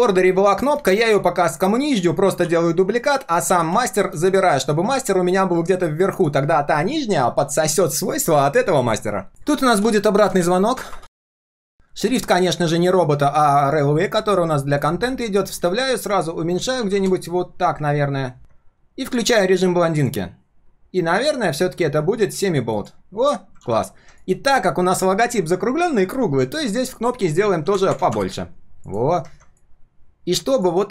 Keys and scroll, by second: 2.4 ctrl+d, 3.4 ctrl+x, 4.8 ctrl+v, 14.2 ctrl+alt+c, 15.1 ctrl+alt+v, 23.6 ctrl+s.